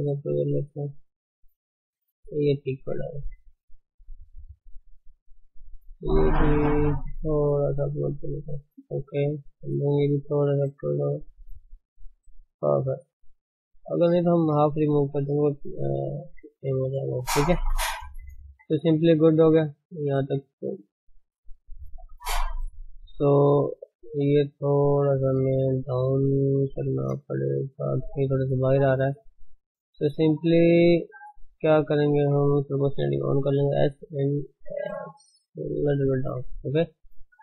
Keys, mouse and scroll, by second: 1.4 click, 1.7 g, 3.1 Tab, 3.6 Tab, 4.4 click, 5.4 click, 6.8 g, 9.5 click, 10.8 g, 12.6-13.6 scroll down 13, 13.9-15.4 shift+middle drag, 15.4-15.7 scroll up 4, 16.2 Tab, 17.7-18.0 scroll up 2, 18.0 shift+middle click, 18.5 Tab, 19.0 shift+middle click, 19.5 Tab, 20.6-21.0 scroll down 1, 21.0 shift+middle click, 21.4 click, 21.7 Tab, 22.0 scroll up 1, 23.2 Tab, 23.7 click, 24.0 Tab, 24.9 click, 25.8 alt+shift+click, 26.2 alt+shift+click, 26.8 alt+shift+click, 27.0 shift+z, 27.3 click, 28.0 shift+z, 28.8-29.6 scroll up 2, 29.6 click, 30.0 alt+shift+click, 30.4 alt+shift+click, 31.9 alt+shift+click, 32.9 o, 33.7 s, 36.0 Tab, 36.4 scroll down 3, 36.7 ctrl+s, 36.9-37.4 middle drag.